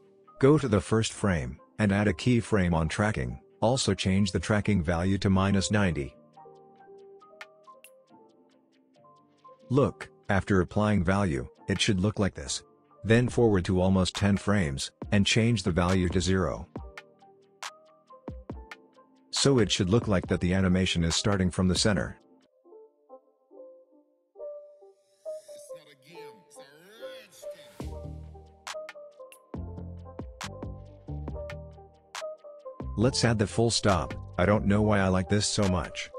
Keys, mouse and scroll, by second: 7.4 Return, 8.8-10.6 drag, 18.1 Return, 19.6-20.2 click, 20.1 space, 22.5-23.5 click, 23.2 space, 25.5-26.1 drag, 29.0 space, 31.8-32.7 drag, 34.7-35.4 drag.